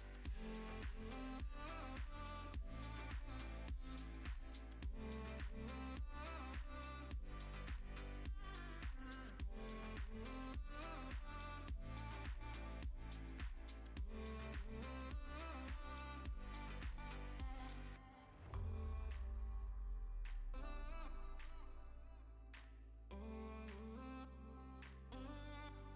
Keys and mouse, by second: 0.0-2.9 typing, 0.2 click, 0.9 click, 1.7 click, 2.1 click, 2.3 click, 2.5 alt+d, 2.8 click, 3.5 click, 3.6 alt+d, 3.8 click, 3.9 alt+d, 4.6 click, 4.6-7.5 typing, 5.0 click, 5.4 click, 5.7 alt+d, 5.9 click, 6.2 click, 6.4 click, 6.6 alt+d, 6.9 click, 7.4 click, 8.1 click, 8.5 alt+d, 8.8 click, 8.9 s, 9.4 click, 9.4 g, 9.9 click, 10.7 click, 12.3 shift+click, 12.8 g, 13.5 click, 13.9 click, 14.1 g, 14.1 z, 15.0 click, 15.1 g, 15.4 click, 16.2 click, 16.3 s, 19.2 Escape, 19.5 s, 19.9 click, 20.3 s, 20.8 Escape, 21.3 click, 21.4 s, 22.1 click, 23.2 ctrl+s, 23.3 z, 23.8 ctrl+s, 24.0 click, 24.5 click, 24.7 click, 25.3 click, 25.6 ctrl+s.